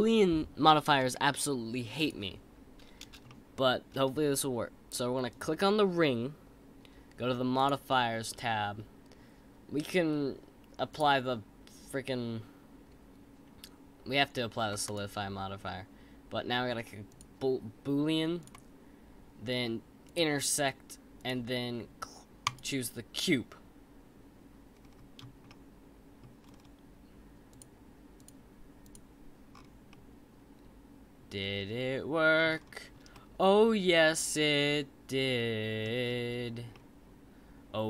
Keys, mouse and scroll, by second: 3.2-5.3 shift+middle drag, 5.3 click, 7.5 click, 10.9-14.0 drag, 14.8-17.8 drag, 18.4-21.2 drag, 24.7-25.4 scroll up 5, 25.4-26.4 middle drag, 26.4-27.5 scroll down 6, 27.5 click, 28.1 click, 28.8 click, 29.5-29.9 scroll up 3, 29.9-32.4 middle drag, 32.4-33.1 scroll down 5, 33.1-36.0 middle drag, 36.0-36.7 scroll up 2, 36.7-37.8 middle drag.